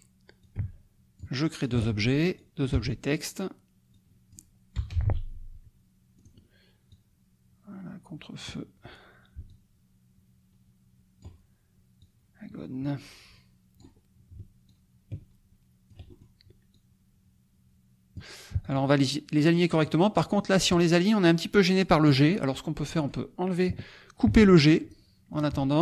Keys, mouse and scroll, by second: 0.4 click, 0.6 space, 1.6 click, 2.3 click, 2.7 BackSpace, 4.0 click, 4.7 BackSpace, 6.1 click, 6.9-8.5 drag, 9.4-11.4 ctrl+drag, 11.9-13.9 drag, 14.7-16.0 ctrl+drag, 16.0-16.4 ctrl+scroll up 1, 16.7-18.3 drag, 18.6 shift+click, 19.8 click, 22.0 click, 22.9 click, 24.2 ctrl+x, 25.3 shift+click.